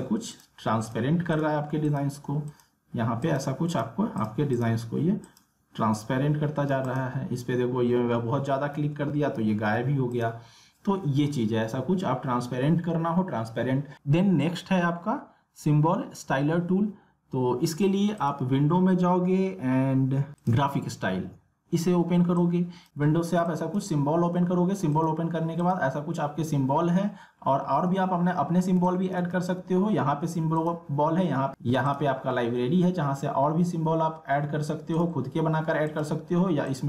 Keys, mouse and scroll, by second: 8.8 ctrl+z, 10.1 click, 18.2 click, 20.4 click, 22.9 alt+scroll down 1, 23.4 space, 23.5 click, 28.3 scroll up 1, 28.7 space, 28.8 click, 29.4-29.7 alt+scroll down 1, 30.6 click, 35.0 click.